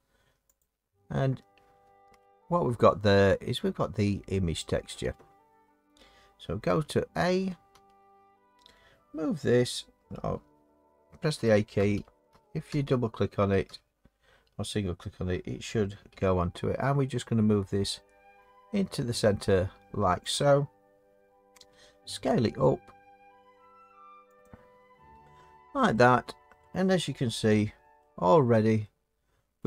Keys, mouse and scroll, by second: 0.6 click, 0.6-1.3 scroll, 7.7 a, 11.4-13.7 typing, 16.1 g, 20.3 click, 21.7 s, 24.4 click, 26.6 middle click, 27.5 Tab.